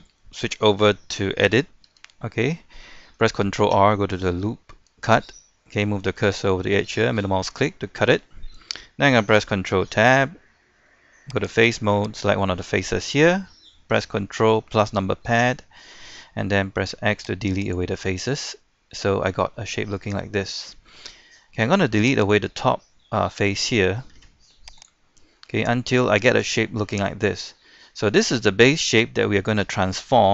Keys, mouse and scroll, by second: 1.9 Tab, 3.6 ctrl+r, 7.4-9.1 middle drag, 9.9 ctrl+Tab, 11.4 click, 12.2 right click, 15.1 ctrl+KP_Add, 16.8 x, 17.7 click, 18.2-19.3 middle drag, 19.3 scroll up 1, 19.6-22.2 middle drag, 22.2 right click, 22.8 middle click, 24.2 x, 24.8 click, 25.1-25.4 scroll down 1, 25.4-27.4 middle drag, 27.6-27.9 scroll up 1, 27.9 scroll down 1, 28.1 middle click, 28.9-29.6 scroll up 1, 29.6-30.3 middle drag.